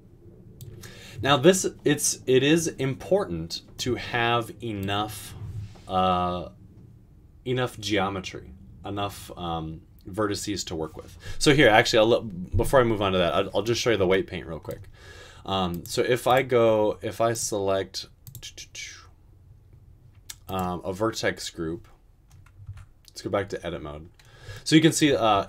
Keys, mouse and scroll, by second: 22.7 Tab, 25.3 Tab.